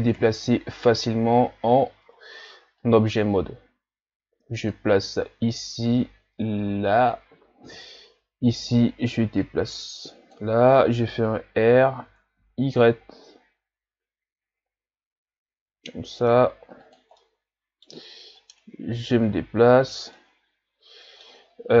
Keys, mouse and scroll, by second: 0.1 KP_7, 1.7-2.8 scroll down 3, 2.8-7.7 drag, 7.7 KP_3, 8.7-9.4 scroll up 2, 9.4-11.8 drag, 11.8 r, 17.2-18.4 middle drag, 18.4-20.1 drag, 20.1-21.8 middle drag.